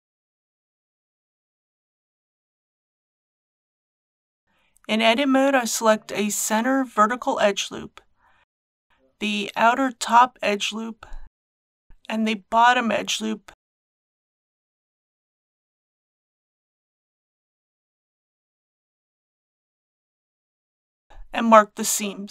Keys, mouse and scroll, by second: 1.2 click, 4.4 KP_1, 6.1 alt+click, 7.0 middle click, 9.1 alt+shift+click, 10.2-11.4 middle drag, 12.7 alt+shift+click, 17.6-20.6 middle drag, 20.6-20.9 scroll up 1, 21.4 right click.